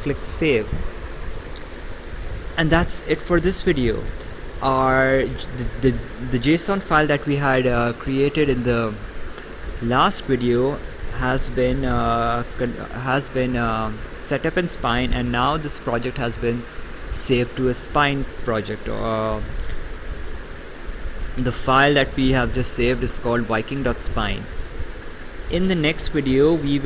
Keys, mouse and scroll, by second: 0.2 click, 1.8 right click, 19.0 right click, 26.6 right click.